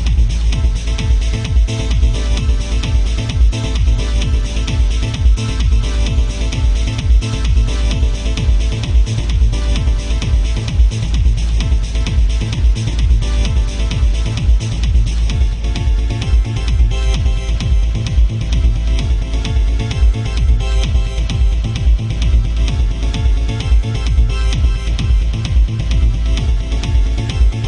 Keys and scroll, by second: 1.3 ctrl+shift+z, 2.8 ctrl+z, 5.1 ctrl+z, 9.3 ctrl+z, 10.0 ctrl+z, 15.6 ctrl+z, 19.0 ctrl+z.